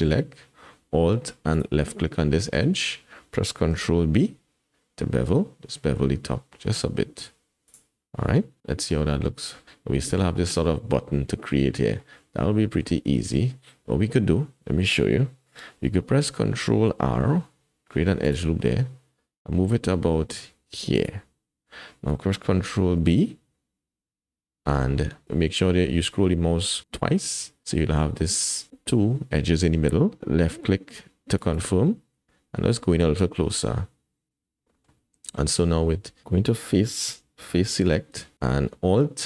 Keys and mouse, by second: 2.3 shift+click, 3.7 ctrl+b, 8.6 KP_1, 12.0 middle click, 17.3 ctrl+r, 22.8 ctrl+b, 33.6-34.8 drag, 37.8 3.